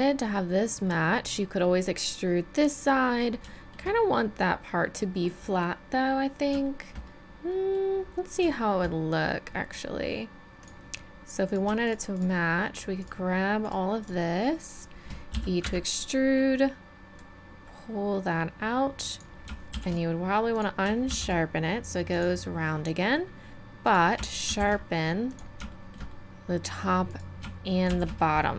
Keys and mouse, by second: 1.9-4.3 middle drag, 5.8 middle click, 8.0-15.3 middle drag, 15.3 e, 17.2-18.5 drag, 19.7 shift+e, 21.1 shift+e, 22.7-23.9 drag, 23.9 middle click, 24.5 shift+e, 27.9 shift+e.